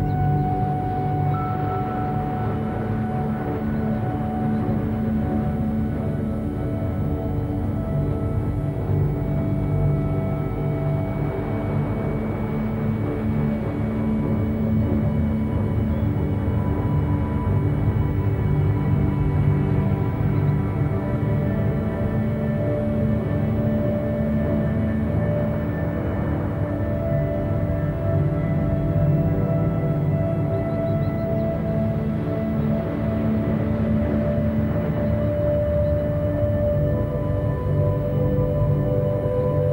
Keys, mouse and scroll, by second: 0.5-3.8 typing, 0.9 click, 1.2 Tab, 7.2 a, 7.6 shift+d, 8.2 g, 11.1 a, 11.8 shift+d, 12.6 g, 14.3 a, 14.5 scroll down 4, 14.9 shift+middle click, 15.2-15.7 scroll up 2, 15.7 a, 15.9 a, 18.8-19.9 typing, 21.1 shift+d, 21.6 g, 24.2 a, 24.4 a, 24.7 scroll down 1, 25.0 Tab, 25.1-25.5 middle drag, 25.5 a, 25.7 a, 25.7 scroll down 1, 26.1-26.4 shift+middle drag, 26.4-26.7 scroll up 1, 26.7-27.1 shift+middle drag, 27.1-27.5 scroll up 1, 27.5 click, 27.9-30.8 middle drag, 30.8 Tab, 31.4 middle click, 31.9 scroll up 4, 32.4 shift+middle click, 32.8 scroll down 1, 33.0 Tab, 33.2 middle click, 33.3 Tab, 35.1 click, 35.5 Tab, 35.8 scroll up 1, 36.1 2, 36.6 middle click, 37.0 scroll up 1, 37.3 shift+middle click, 38.1-39.2 scroll up 1, 39.2 click.